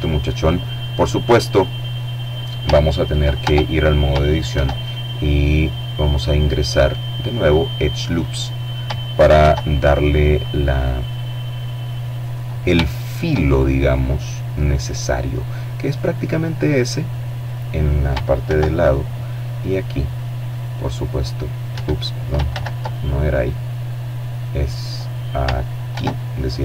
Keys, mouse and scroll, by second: 1.4 ctrl+Tab, 2.5 ctrl+r, 3.7 click, 6.2 click, 7.4 ctrl+r, 7.9 ctrl+click, 10.3 click, 11.5 shift+click, 13.6 click, 15.4 click, 16.5 ctrl+r, 18.5 click, 19.8 Escape, 20.5 ctrl+z, 21.0-23.4 ctrl+middle drag, 23.9 ctrl+r, 24.6 click.